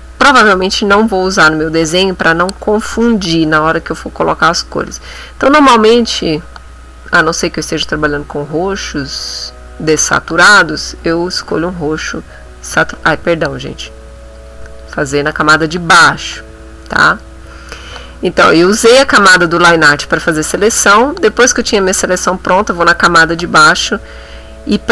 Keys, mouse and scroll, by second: 4.9 click, 6.0-7.6 drag, 8.1-10.1 drag, 11.0 click, 13.0 ctrl+z, 14.4 click, 15.9 click, 17.0 middle click, 18.9 click, 21.2 click.